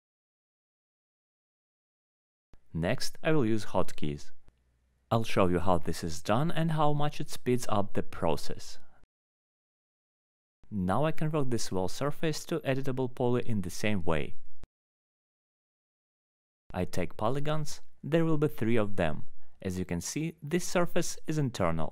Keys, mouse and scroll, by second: 1.2 click, 2.5 click, 3.4 click, 3.8 click, 4.8 click, 5.8 alt+h, 6.5 middle click, 7.2 click, 8.1 alt+middle click, 8.5 scroll, 8.6 alt+middle click, 9.1 click, 9.4 alt+q, 10.1 alt+middle click, 10.7 alt+middle click, 11.3 alt+middle click, 12.7 click, 14.3 click, 14.7 middle click, 16.2 4, 17.2 click, 17.7 alt+middle click, 18.3 ctrl+click, 18.8 alt+middle click, 20.1 alt+middle click, 20.4 middle click, 20.6 middle click, 21.2 alt+middle click, 21.4 middle click, 21.4 middle click.